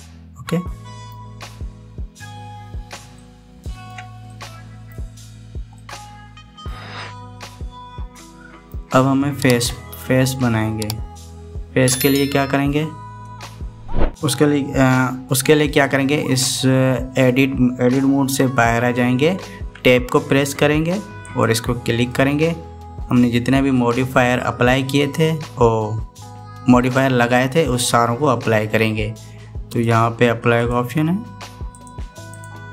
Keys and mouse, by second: 3.9 shift+middle click, 5.0 middle click, 6.5-9.6 middle drag, 20.5 Tab, 22.0 click, 22.9 middle click, 30.6-31.5 drag, 32.5-32.7 drag.